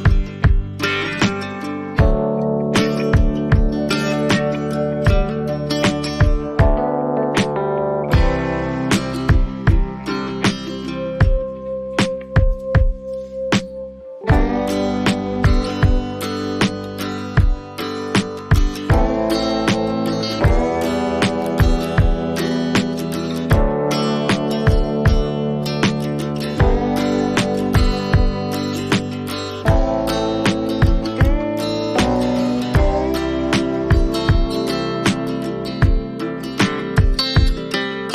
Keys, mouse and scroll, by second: 4.8 click, 6.4 click, 7.2-8.2 alt+scroll down 6, 10.1 click, 11.3 click, 12.1-12.5 alt+scroll, 12.8 click, 14.7 click, 15.7 click, 17.8 click, 21.3 click, 22.8 click, 26.1 click, 29.7 click, 30.4 click, 34.0 click, 34.2 right click, 35.2 click, 36.5 click.